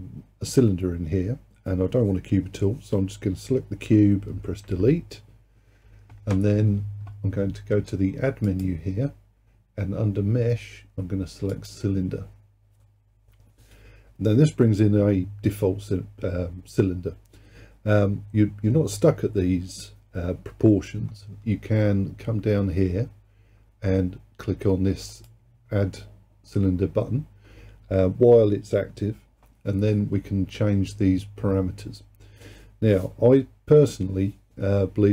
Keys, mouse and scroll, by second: 4.7 Delete, 8.5-11.7 drag, 25.2-28.3 drag.